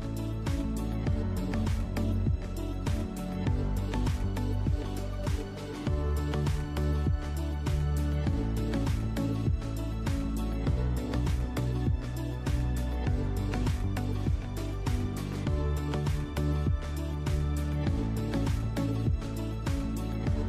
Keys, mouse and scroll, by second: 1.5 Escape, 1.8 z, 1.9 middle click, 1.9-2.7 scroll up 3, 2.1 middle click, 2.7 ctrl+r, 4.3 middle click, 4.3 click, 4.5-11.6 middle drag, 5.1 Tab, 5.5-5.8 scroll down 2, 6.4 scroll down 1, 7.4 scroll up 1, 9.0 scroll up 1, 9.4 ctrl+r, 11.6 ctrl+r, 12.9 click, 13.1 scroll down 1, 13.3-16.8 shift+middle drag, 14.0 scroll up 1, 14.7 ctrl+r, 16.8 click, 17.2 ctrl+r, 18.9 click, 19.2 scroll down 1, 19.5 middle click, 20.2 Tab, 20.4 click.